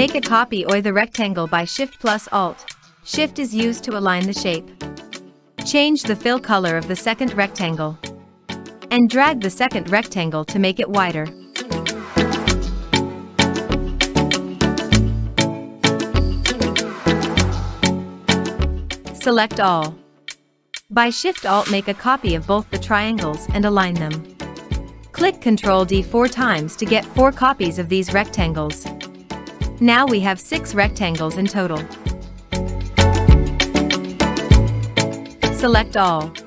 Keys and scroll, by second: 27.0 ctrl+d, 27.9 ctrl+d, 28.6 ctrl+d, 29.3 ctrl+d, 32.8 ctrl+d.